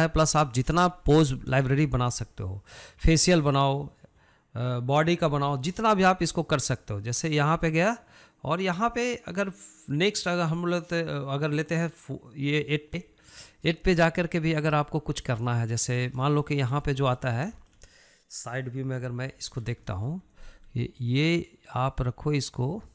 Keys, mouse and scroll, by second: 3.8-14.2 drag, 14.2-16.6 middle drag, 16.6 click, 17.0-17.7 shift+middle drag, 17.7 scroll up 2, 18.0-20.1 shift+middle drag, 20.1 KP_3, 20.7 scroll up 2, 21.0-22.9 shift+middle drag.